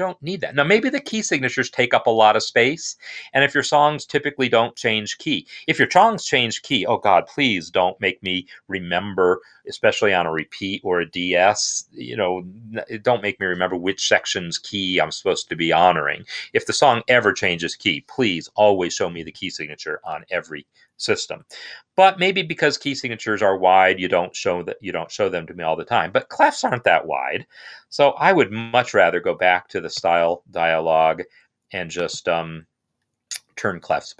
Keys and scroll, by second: 28.6 alt+o, 29.3 Down, 29.8 Return.